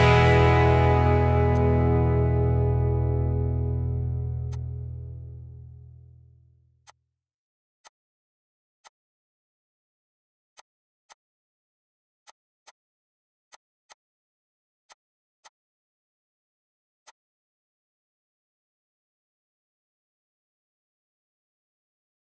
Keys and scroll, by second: 10.9 Escape, 15.8 6, 15.9 Return.